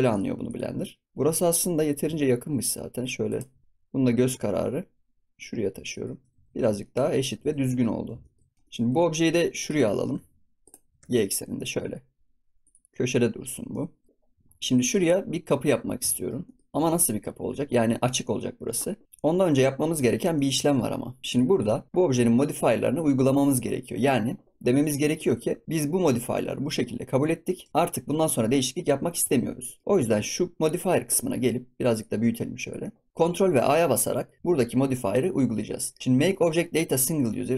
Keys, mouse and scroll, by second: 0.0 click, 0.4 click, 1.1 shift+click, 1.7 g, 3.6 g, 6.4 ctrl+s, 6.5 scroll down 1, 6.7-7.4 shift+middle drag, 7.4 ctrl+s, 7.4 scroll down 2, 7.7 middle drag, 7.9 scroll up 3, 8.2-8.5 shift+middle drag, 8.5 ctrl+s, 8.7-9.2 shift+middle drag, 9.2 scroll up 2, 9.6 click, 10.0 g, 10.8 g, 13.6-14.1 middle drag, 14.1 ctrl+s, 14.4 scroll up 1, 14.7 click, 15.1-15.6 middle drag, 15.6 scroll up 3, 15.9 scroll down 1, 16.1-16.8 shift+middle drag, 16.8 ctrl+s, 16.8 scroll up 4, 17.2 scroll down 2, 17.9 ctrl+s, 18.7-19.0 scroll down 1, 19.0 ctrl+s, 19.2 scroll up 1, 19.4-20.0 scroll down 3, 20.0-20.6 shift+middle drag, 20.6 ctrl+s, 20.7 scroll up 2, 21.2 middle click, 21.3 click, 21.6 click, 24.6-25.0 scroll up 2, 25.0-27.0 scroll down 2, 27.0-27.7 middle drag, 27.7 scroll down 4, 28.0-28.4 middle drag, 28.4 scroll up 3, 28.7-29.0 scroll down 1, 29.0 shift+middle click, 29.4 scroll down 1, 29.6-31.9 middle drag, 31.9-33.1 drag, 34.3 ctrl+a.